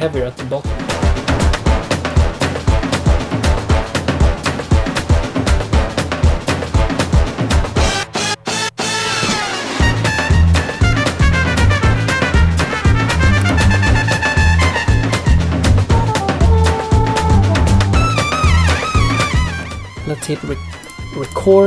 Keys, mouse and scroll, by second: 20.7 click, 21.2 click.